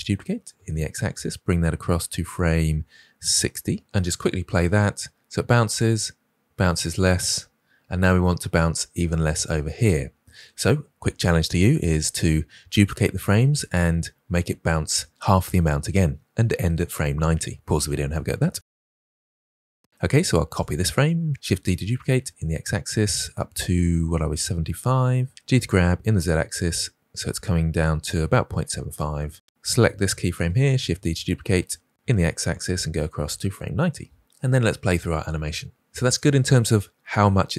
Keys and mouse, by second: 4.0 click, 4.6 space, 7.1 space, 20.4 click, 21.3 shift+d, 25.3 g, 29.5-30.1 drag, 31.5 shift+d, 34.2 space.